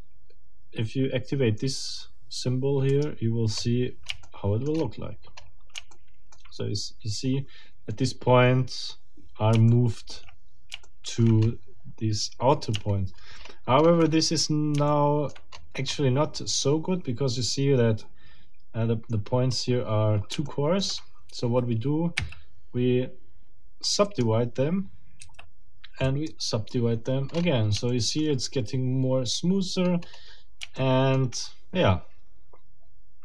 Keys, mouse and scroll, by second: 2.9 middle click, 3.6-4.0 scroll up 2, 4.2 shift+middle click, 4.8 shift+scroll up 2, 5.4-5.7 shift+scroll up 2, 5.9 shift+middle click, 8.4-8.8 scroll down 2, 9.2 scroll down 2, 9.7 shift+middle click, 10.8 shift+middle click, 11.5 shift+scroll up 2, 12.9 shift+scroll down 2, 13.4-14.1 shift+scroll up 4, 14.2-14.5 shift+scroll down 2, 14.9 shift+middle click, 15.9 shift+scroll up 2, 19.0-19.7 scroll down 4, 20.4 shift+click, 20.9 shift+scroll down 2, 22.2 w, 24.0 click, 25.2 w, 26.0 click, 27.3-27.6 scroll up 2, 27.9 shift+middle click, 29.8-30.3 scroll up 2, 30.8 shift+middle click, 31.7-32.0 shift+scroll down 2.